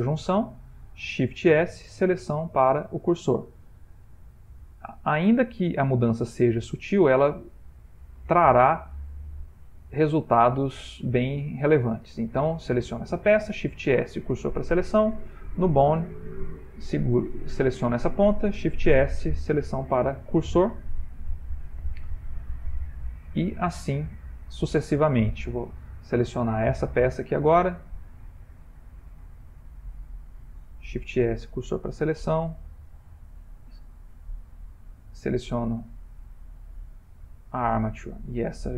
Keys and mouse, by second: 1.3 shift+s, 4.3 middle click, 6.2 middle click, 6.8 middle click, 7.9 middle click, 8.4 shift+middle click, 9.3 middle click, 10.8 middle click, 11.4 Tab, 12.1 click, 13.6 shift+s, 15.3 click, 15.7 Tab, 16.7 click, 17.6 g, 18.8 shift+s, 21.2 middle click, 21.9 middle click, 22.3 shift+middle click, 22.5 shift+middle click, 22.9 middle click, 23.2 middle click, 25.9 ctrl+middle click, 26.4 shift+middle click, 27.1 ctrl+middle click, 28.1 Tab, 28.7 click, 29.7 click, 31.1 shift+s, 32.9 Tab, 33.2 click, 34.2 Tab, 34.7 click, 35.9 Tab, 36.5 click, 37.7 middle click, 37.7 middle click, 38.2 middle click.